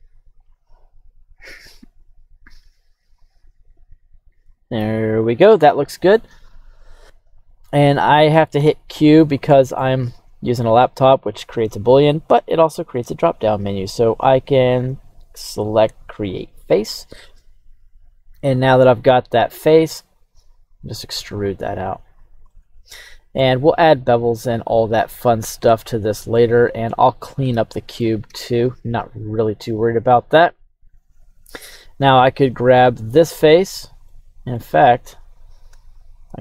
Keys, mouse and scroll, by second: 0.4-1.6 drag, 2.5 click, 3.1 click, 4.5 click, 9.4 middle click, 10.0 q, 12.2 click, 13.8-16.4 drag, 17.4-19.5 middle drag, 20.0 e, 22.1 click, 22.5 middle click, 25.7 middle click, 27.5 middle click, 28.3 KP_3, 31.5 right click, 34.1 middle click, 34.8 right click, 35.9 shift+right click.